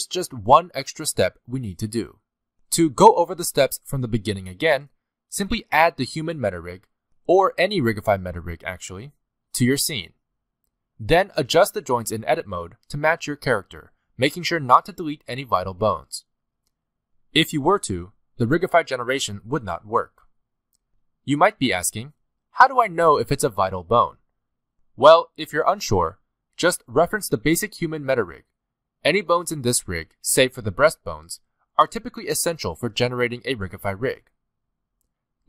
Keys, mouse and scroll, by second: 4.9 middle click, 5.0 scroll down 2, 5.1 Tab, 5.2 middle click, 5.8 ,, 6.1 ., 6.6 middle click, 6.8 s, 7.6 shift+middle click, 7.7 scroll up 4, 7.9 middle click, 8.2 s, 8.6 scroll down 2, 8.9 click, 9.3-19.2 typing, 9.8 middle click, 10.0 scroll up 2, 10.1 shift+middle click, 10.7 click, 11.6 shift+middle click, 11.8 scroll up 1, 11.9 middle click, 11.9 scroll down 1, 12.0 scroll up 1, 12.6 shift+middle click, 12.7 scroll up 2, 14.0 middle click, 14.1-14.5 scroll down 6, 14.5 middle click, 14.8 shift+middle click, 14.9-15.2 scroll up 2, 16.4 shift+middle click, 16.6 click, 16.6 click, 16.8 shift+middle click, 17.1 shift+middle click, 17.3 click, 17.6 shift+middle click, 17.7 scroll down 2, 17.8 middle click, 18.3 middle click, 18.5 click, 18.6 shift+middle click, 19.0 click, 19.1 shift+middle click, 19.4 middle click, 19.7 middle click, 19.8 shift+middle click, 19.9 scroll down 4, 20.0 shift+middle click, 20.1 middle click, 20.2 shift+middle click, 20.5 click, 20.7 g, 20.9 g, 21.0 middle click, 21.1 g, 21.4 middle click, 21.5 Tab, 21.5 shift+middle click, 21.5 z, 21.6 scroll down 1, 21.8 middle click, 22.6-23.1 scroll up 2, 23.1 click, 23.4 g, 24.3 shift+middle click, 24.4-25.1 scroll down 4, 24.6 middle click, 25.1 Tab, 25.5 scroll up 1, 25.9 z, 26.4 middle click, 27.2 shift+a, 31.1 scroll down 1, 31.2 middle click, 31.6 g, 32.6 shift+middle click, 32.9 middle click, 34.1 scroll up 1, 34.9 z.